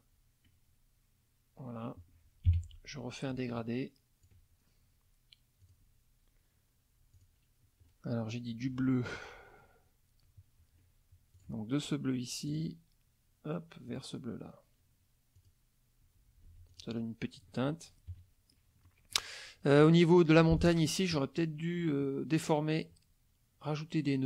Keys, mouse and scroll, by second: 2.5 g, 3.3 ctrl+click, 5.6 click, 7.1 click, 11.4 click, 12.5 click, 13.9 click, 15.4 click, 16.5 F1, 16.7 click, 18.1 KP_Subtract, 18.9 middle click, 19.7 click, 20.4 F2, 20.6 click.